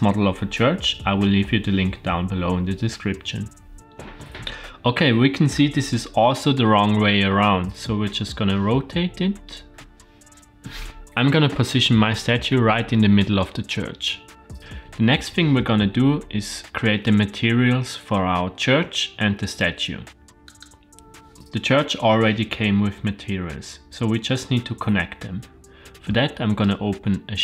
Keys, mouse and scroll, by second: 3.7 shift+middle click, 3.7 scroll up 4, 7.5 r, 12.9 shift+middle click, 14.3 scroll up 1, 20.5 click, 26.6 click.